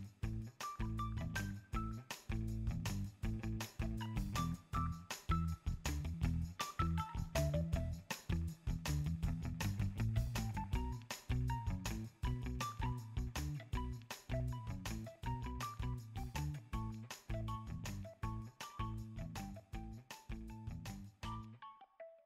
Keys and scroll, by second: 7.0 super+v, 14.2 super+c, 15.8 super+v, 17.2 space, 21.5 space, 21.8 super+s.